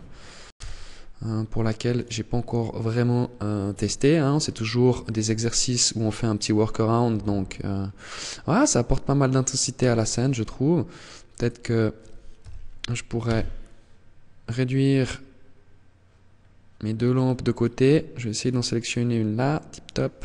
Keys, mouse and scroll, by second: 1.1 click, 3.5-4.2 scroll up 2, 15.7-16.7 scroll down 5, 17.3 right click, 18.8 click.